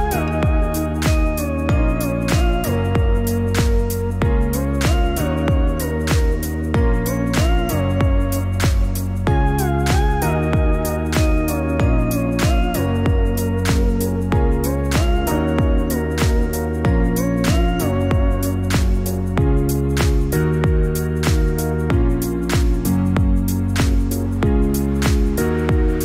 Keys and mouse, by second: 7.4 click, 10.1-11.3 drag, 12.0-23.7 drag.